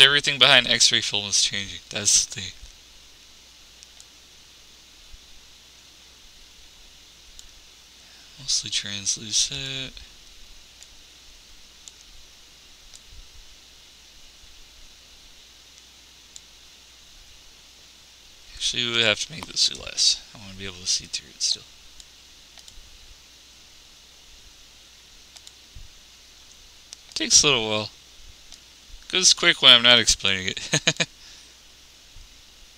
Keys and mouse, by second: 20.4 x.